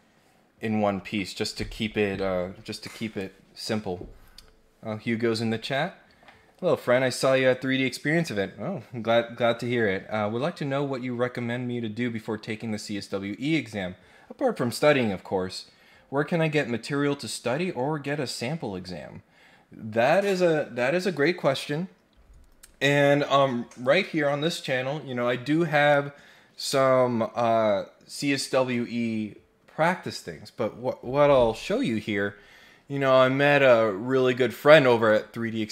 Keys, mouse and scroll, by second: 35.0 middle click.